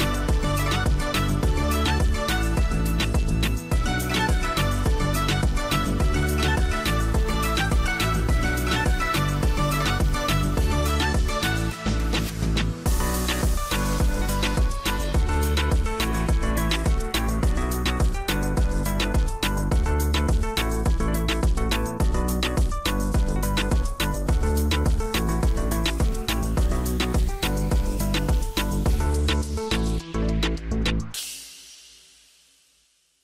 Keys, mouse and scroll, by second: 6.4 double click, 20.6 double click, 22.0 middle click, 28.9 middle click, 30.2 right click.